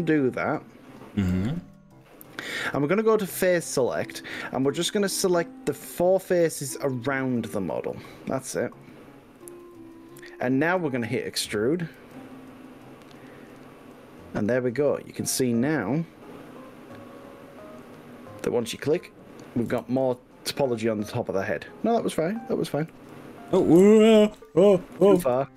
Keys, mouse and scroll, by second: 0.5 click, 1.3 middle click, 2.5-3.7 middle drag, 5.3 click, 6.3 click, 6.8 middle click, 8.5 shift+click, 8.9 click, 9.5 shift+click, 9.7-11.5 middle drag, 12.1 e, 17.8 click, 18.1-19.7 middle drag, 19.8 ctrl+z, 20.6-22.4 middle drag, 23.0 h, 23.8 z, 25.0 ctrl+z.